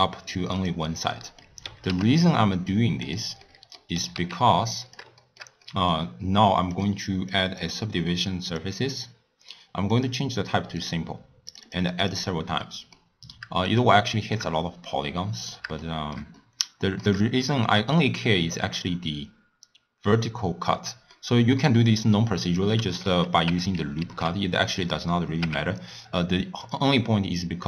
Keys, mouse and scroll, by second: 1.1-1.6 middle drag, 1.6 s, 3.4-3.9 middle drag, 3.9 s, 5.2-5.9 shift+middle drag, 5.9-6.7 scroll up 4, 6.7 drag, 7.2 click, 8.5-10.0 drag, 10.7 click, 11.5 click, 12.6-13.7 middle drag, 13.7 click, 14.1-20.4 shift+middle drag, 21.1-23.4 middle drag, 23.4 Tab, 24.0 ctrl+r, 25.4 Tab.